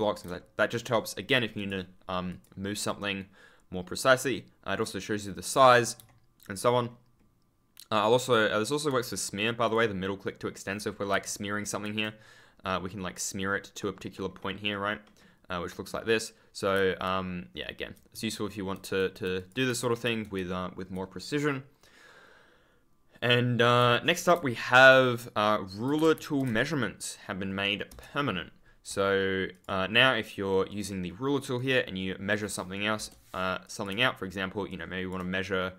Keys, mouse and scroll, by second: 1.5 click, 2.8 right click, 6.6 super+scroll up 1, 9.6 click, 10.7 s, 11.2 s, 12.6 middle click, 13.7 middle click, 15.7 middle click, 16.4-20.0 typing, 19.3 click, 19.8-21.1 shift+scroll up 2, 23.8 d, 25.9 ctrl+a, 26.0 ctrl+s, 26.1 ctrl+space, 29.4 click, 30.6 right click, 32.9 BackSpace, 33.6 click, 34.6 ctrl+click, 34.7 scroll up 1.